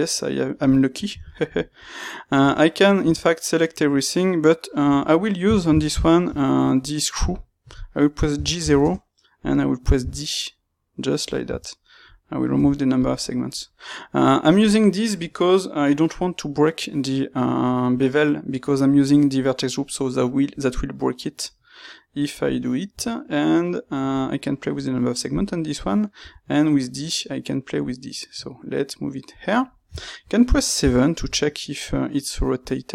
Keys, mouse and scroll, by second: 0.5-2.3 middle drag, 2.3 Tab, 3.0 a, 4.8 Tab, 5.5 ctrl+middle click, 6.2 space, 13.2 middle click, 20.0 middle click, 29.5 middle click.